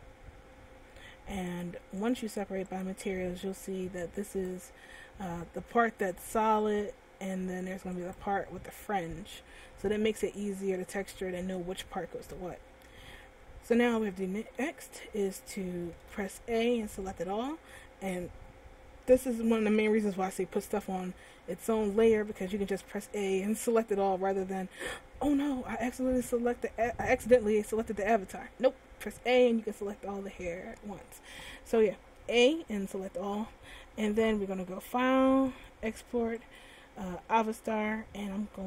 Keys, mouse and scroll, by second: 1.8 click, 2.3 click, 5.1 right click, 6.9 right click, 8.9 right click, 12.2 a, 14.0 middle click, 15.1 middle click, 16.1 a, 17.3 middle click, 21.1-21.8 scroll down 1, 21.8 middle click, 23.0 a, 23.4 a, 32.6 middle click, 34.3 click.